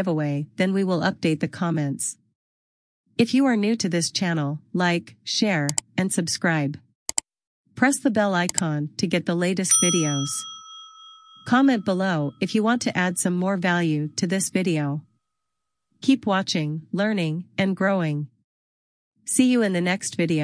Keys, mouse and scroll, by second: 6.9 click.